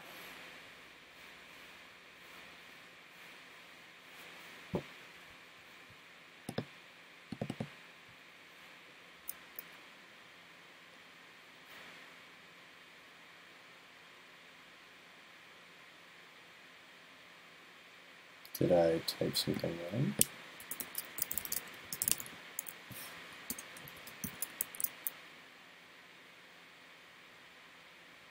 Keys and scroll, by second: 24.7 super+s.